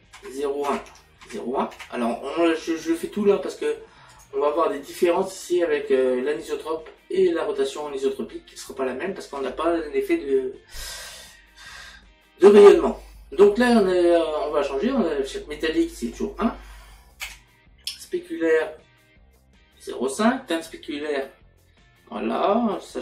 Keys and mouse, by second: 15.7 click, 17.2 KP_1.